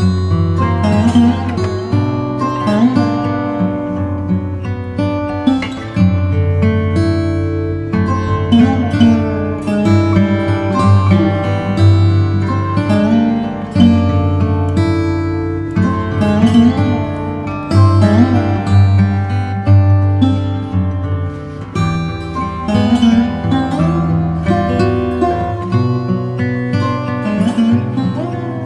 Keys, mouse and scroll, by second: 2.3 click, 3.9 click, 7.3 click, 8.8 Return, 10.1 Return, 11.6 ctrl+v, 14.2 click, 18.0 click.